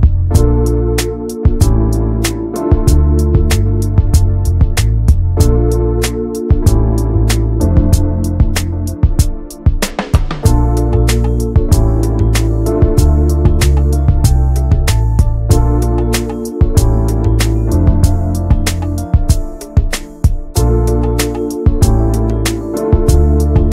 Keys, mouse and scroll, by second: 1.4 right click, 2.3 click, 2.6 Tab, 2.9 Tab, 3.1 click, 3.9 l, 6.6 click, 6.8 Tab, 10.7 click, 11.5 l, 13.3 shift+middle click, 13.4 scroll up 1, 13.7 s, 15.1-16.7 shift+middle drag, 16.7 g, 19.7-20.8 shift+middle drag, 20.8 g, 21.8-23.7 shift+middle drag.